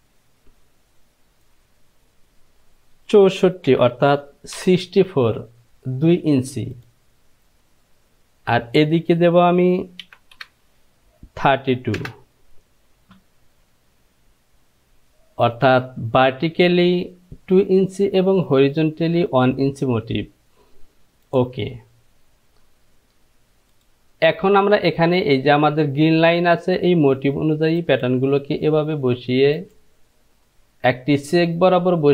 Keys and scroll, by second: 3.9 Right, 4.8 Left, 10.3 Page_Down, 10.6 Down, 12.3 Return.